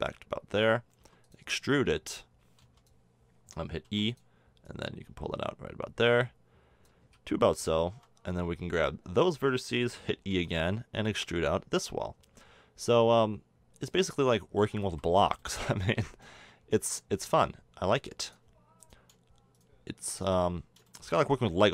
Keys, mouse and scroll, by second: 1.0 r, 3.8 e, 7.1 a, 7.9 b, 10.3 e, 14.8 a, 15.0 Tab, 16.7 Tab, 20.9-21.7 middle drag.